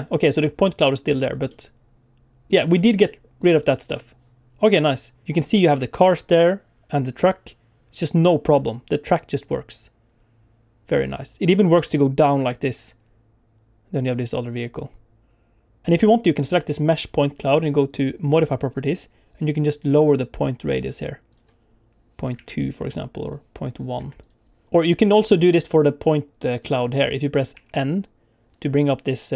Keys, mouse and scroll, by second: 1.1 click, 1.5 middle click, 3.4 click, 4.7 click, 6.1 click, 15.8 click, 18.3 click, 19.4 click, 22.4 alt+a, 23.1 click, 25.5 click, 26.6 click, 27.6 n.